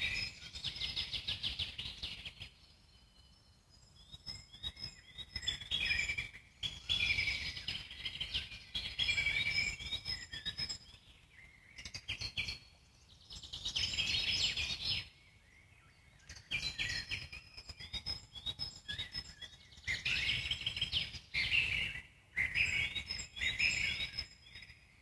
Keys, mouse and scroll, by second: 3.8 shift+d, 7.3 click, 8.0 click, 8.5 click, 9.6-10.3 scroll down 1, 10.3 g, 21.7-23.8 drag.